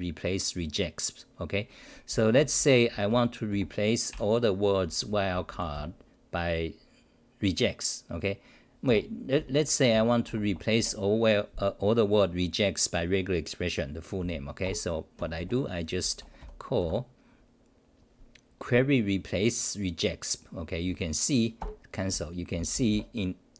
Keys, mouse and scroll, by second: 2.1-3.6 typing, 4.1 ctrl+=, 4.9-6.2 typing, 8.8 ctrl+g, 9.1-10.8 typing, 14.6 ctrl+g, 15.2 d, 15.4 d, 21.6 ctrl+g, 22.1 w.